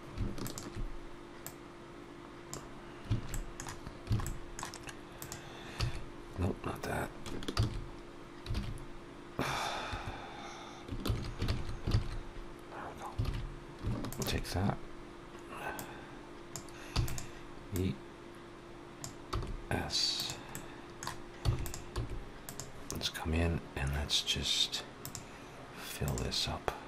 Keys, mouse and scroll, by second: 0.3 alt+shift+click, 1.3 click, 3.2 middle click, 4.0 alt+a, 4.1 middle click, 5.0 click, 5.6 e, 10.9 ctrl+z, 11.4 ctrl+z, 11.8 ctrl+z, 13.1 alt+a, 13.9 alt+shift+click, 15.6 click, 16.8 e, 17.6 click, 19.2 s, 20.3 middle click, 21.3 e, 21.8 s, 25.6 click.